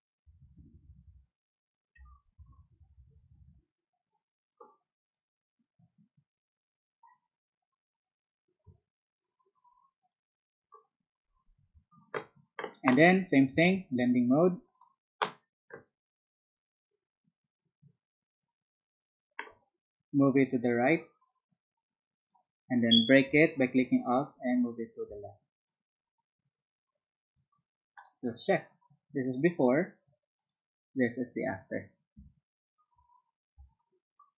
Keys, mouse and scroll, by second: 1.9 b, 4.1 click, 5.1-9.6 drag, 10.0 click, 13.5 right click, 14.6 click, 20.3-22.4 drag, 23.9-24.9 alt+drag, 25.6-27.3 alt+drag, 27.9 alt+click, 30.3 alt+click, 33.6 space, 34.1-34.3 drag.